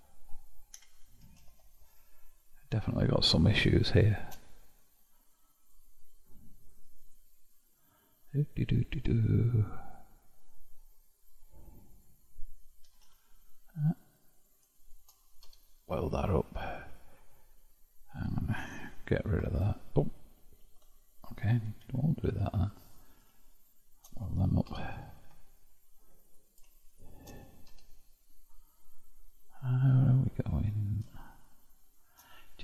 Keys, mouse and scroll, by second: 0.8 a, 1.4 shift+n, 2.5-5.6 middle drag, 5.6 click, 6.6 click, 7.1 click, 7.5-9.5 middle drag, 9.5-10.4 scroll up 2, 12.0 click, 12.9 g, 14.4 click, 15.5 0, 16.9 click, 19.3 ctrl+x, 20.7 ctrl+x, 21.9 ctrl+z, 22.3 ctrl+z, 23.6 shift+click, 24.7 0, 26.3 click, 27.7 0, 28.8-32.6 middle drag.